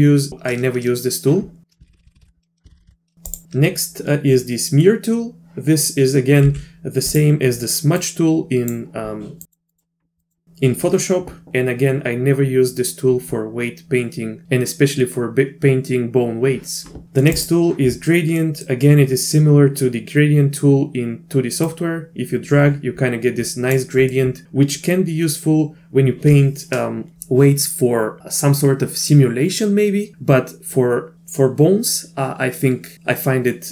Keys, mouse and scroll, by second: 1.9-2.9 ctrl+z, 3.3 click, 6.4 f, 8.0 click, 9.4 click, 9.7 click, 10.2 click, 17.3 click, 18.4 click, 18.4 right click, 21.7-23.7 drag, 24.2-24.5 middle drag, 24.5 drag, 24.5 right drag.